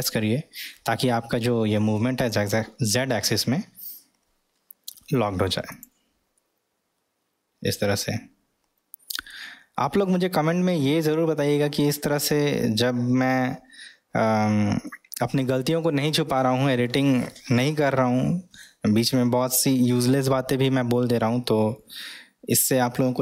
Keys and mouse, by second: 6.4-9.3 middle drag, 10.2-14.8 middle drag, 21.7-22.6 middle drag.